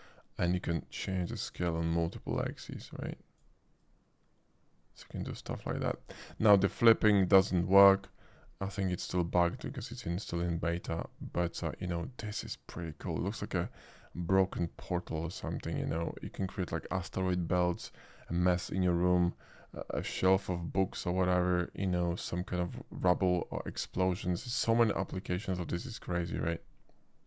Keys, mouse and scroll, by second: 0.4-1.5 drag, 2.1-3.4 drag, 3.8-5.9 drag, 8.7-13.2 middle drag, 13.7 scroll up 1, 13.9-16.0 middle drag, 16.1 middle click, 21.2-24.0 middle drag, 25.6 shift+middle click.